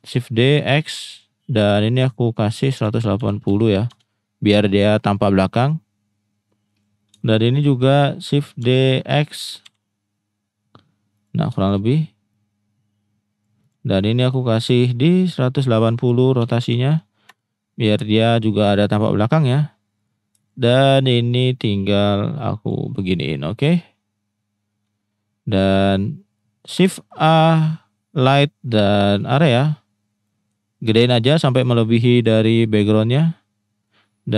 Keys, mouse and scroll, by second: 1.1 click, 2.0-5.9 drag, 6.8-7.1 drag, 7.3-7.6 shift+middle drag, 8.6 shift+d, 9.6 x, 11.1 click, 12.4 click, 13.6 click, 15.3-19.2 drag, 20.0 click, 21.2-22.7 drag, 25.6-25.9 middle drag, 26.3-26.7 middle drag, 26.8 shift+a, 30.4 middle click, 31.0 s, 32.1 click, 33.0-33.3 middle drag, 33.8-34.3 drag.